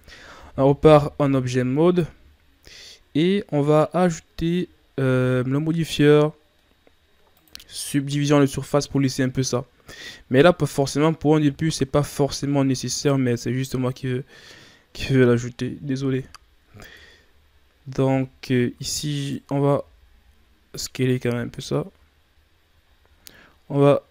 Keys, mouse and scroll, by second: 0.8 KP_1, 1.8-2.3 scroll down 2, 2.4-2.8 scroll down 5, 2.8-3.9 shift+scroll up 4, 3.9-5.1 ctrl+scroll down 4, 6.0 scroll up 2, 7.3-8.5 drag, 8.5-9.5 scroll up 3, 9.5 ctrl+scroll up 1, 10.1-10.6 shift+scroll down 1, 10.6-11.2 ctrl+scroll up 4, 11.4 Tab, 12.9 alt+right click, 13.8-16.0 drag, 16.0 ctrl+z, 16.9 Tab, 17.3-17.7 scroll down 2, 17.7-18.1 scroll up 2, 18.1 Tab, 19.1 alt+right click, 19.8 s, 21.1 Tab, 21.5-22.4 scroll down 2, 22.4 scroll down 3, 22.9-24.1 shift+scroll up 2.